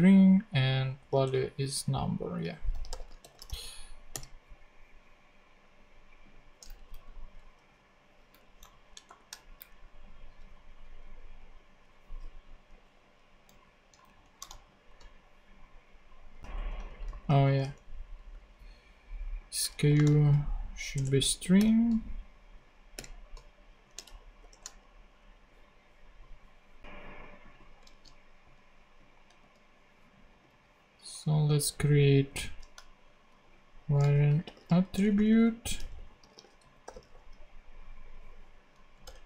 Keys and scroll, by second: 1.2 super+Tab, 2.5-4.1 typing, 6.7 Down, 7.6 ,, 8.4 Down, 8.7 alt+Right, 9.0 alt+shift+;, 9.7 shift+Down, 10.4 Down, 12.6 Down, 13.4 super+Down, 13.5 super+Left, 14.0 shift+super+Down, 14.4 shift+super+Down, 14.5 shift+super+/, 15.5 super+/, 16.4 shift+Up, 16.5 shift+Down, 17.1 super+z, 19.9 shift+;, 19.9 shift+space, 20.2 shift+s, 20.9 Return, 21.6 ,, 23.9 super+,, 24.4 shift+super+p, 27.9 super+c, 29.4 super+d, 31.5 Right, 33.5-37.5 typing, 38.7 super+Right, 39.0 super+Return.